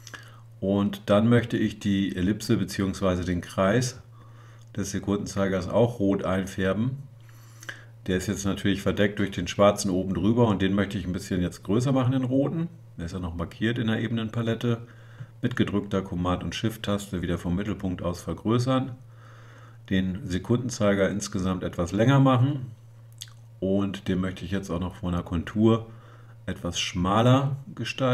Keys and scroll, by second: 8.9 super++, 23.8 super+0.